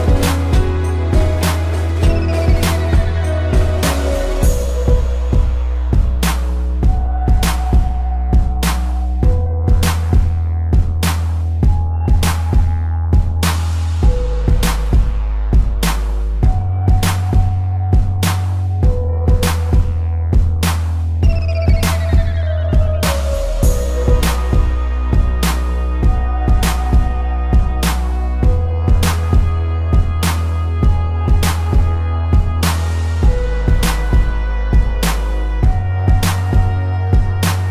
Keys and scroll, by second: 2.7 ctrl+=, 3.9 ctrl+z, 4.4 ctrl+z, 7.0 ctrl+z, 7.3 space, 12.1 ctrl+z, 15.8 ctrl+=, 16.0 space, 17.3 space, 21.4 space, 23.5 space, 25.7 space, 26.9 space, 28.7 space, 31.5 space, 34.2 space.